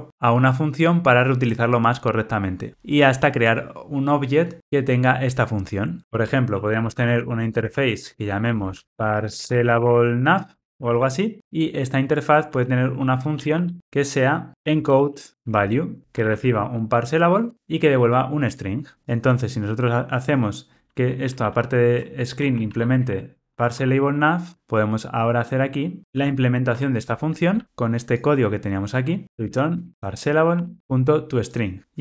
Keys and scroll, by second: 8.0 Return, 8.8 super+z, 17.4 Tab, 18.5 Tab, 24.5 Return, 29.2 super+c, 29.9 super+v, 30.8 Tab.